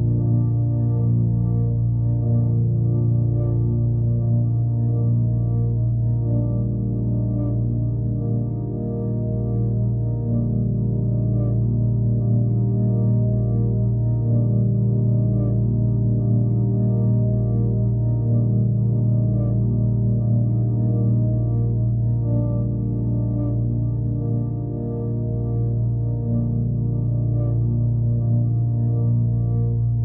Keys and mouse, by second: 0.2 alt+middle click, 2.2 g, 2.9 alt+middle click, 3.1 s, 3.8 alt+middle click, 4.3 r, 5.5 g, 6.9 shift+click, 7.2 middle click, 7.5 alt+middle drag, 9.4 click, 10.2 g, 10.8 r, 13.0-14.0 drag, 15.1 r, 15.6 g, 17.5 shift+click, 17.9 Tab, 18.2 3, 18.5 a, 19.5 shift+n, 19.8 Tab, 20.1 ctrl+a, 20.5-21.2 right drag, 23.8 click, 24.8 alt+click, 26.6 middle drag, 27.0-27.6 alt+middle drag, 27.8 click, 28.5 click, 29.2 ctrl+s, 29.8 click.